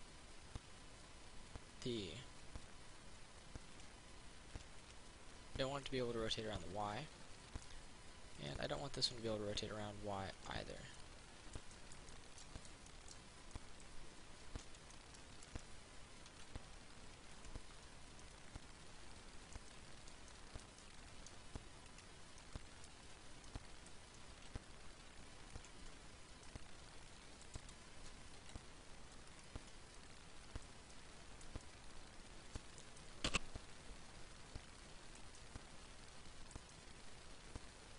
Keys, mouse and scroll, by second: 4.0 click, 6.1 middle click, 9.6 right click, 10.6 click, 11.2 middle click, 14.8 Tab, 15.2 middle click, 17.1 ctrl+r, 17.4 click, 18.0 click, 18.4-22.1 middle drag, 22.1 right click, 22.6 middle click, 25.6 ctrl+r, 25.8 click, 26.1 Tab, 26.7 middle click, 27.7 Tab, 28.6 ctrl+r, 29.6 click, 29.8 click, 30.2-37.9 middle drag.